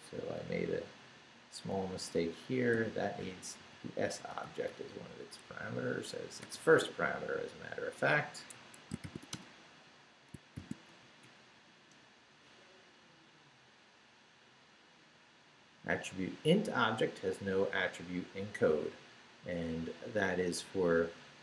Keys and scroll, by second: 0.7 Right, 2.7 i, 3.2 s, 4.5 Down, 4.7 Left, 5.5 s, 6.1 ,, 8.5 Escape, 8.8-10.5 typing, 10.3 shift+Return, 11.0 shift+Up, 11.9 Return.